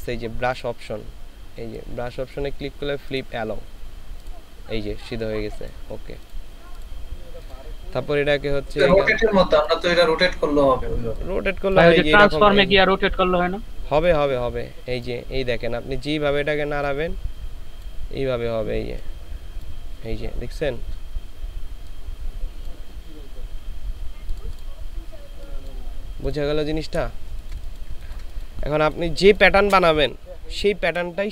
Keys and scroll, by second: 27.3 ctrl+space, 27.9 ctrl+space.